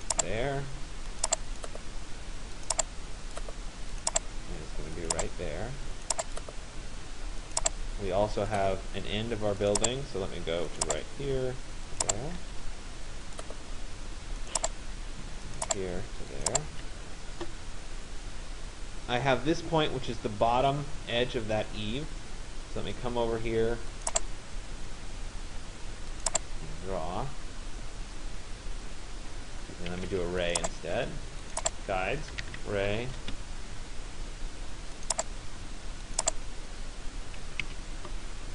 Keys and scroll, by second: 12.1 Return, 16.4 Return, 29.7 Escape, 33.3 Return, 37.3 Escape.